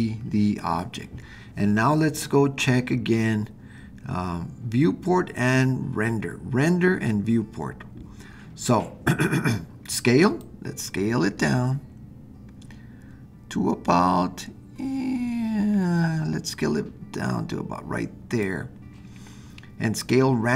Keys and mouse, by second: 10.4-18.5 drag.